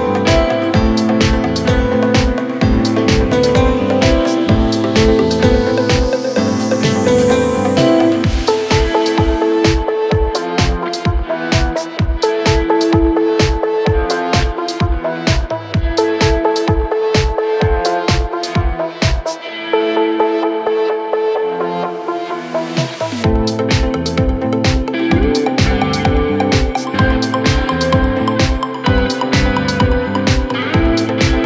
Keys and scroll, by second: 9.8 shift+Page_Down, 23.2 shift+F2, 23.8 Escape, 27.0-31.4 typing, 29.6 Return.